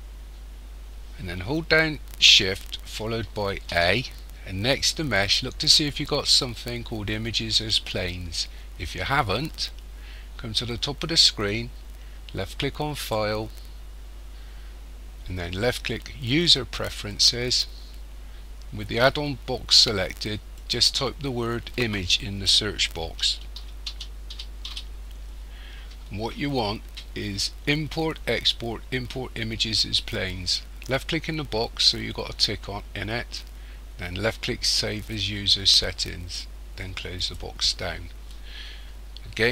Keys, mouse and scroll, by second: 3.5 shift+a, 13.0 click.